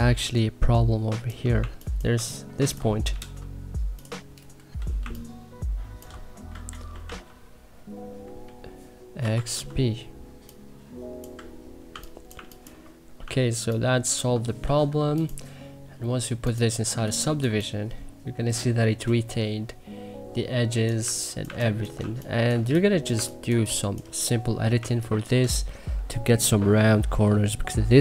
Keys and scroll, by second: 1.5 1, 2.1 2, 3.0 w, 4.5 Delete, 4.9 2, 6.6 x, 7.0 b, 9.1 x, 9.5 b, 11.8 2, 12.2 1, 13.1 2, 14.5 e, 16.9 2, 20.7-21.9 typing, 23.0 1, 23.4 3.